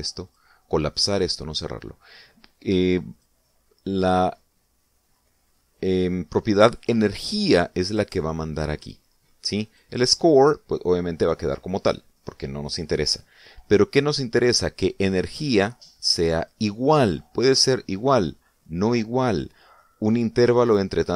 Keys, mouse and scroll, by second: 0.2 click, 1.1 click, 2.0 click, 3.9 click, 10.5 click, 17.2 click.